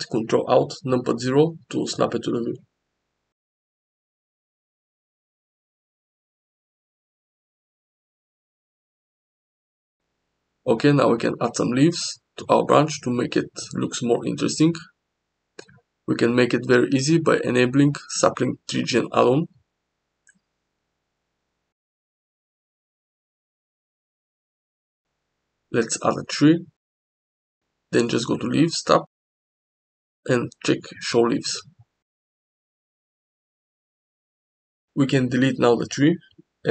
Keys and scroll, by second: 3.0 g, 8.0 s, 8.6 g, 11.6 s, 12.1 g, 23.6 shift+a, 33.7 x, 35.7 s.